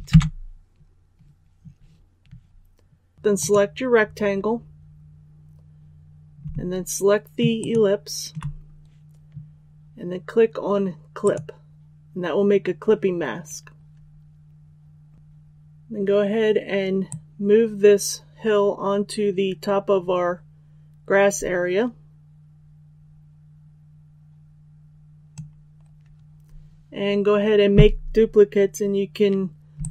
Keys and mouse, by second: 3.1 click, 7.5 shift+click, 11.2-29.9 drag.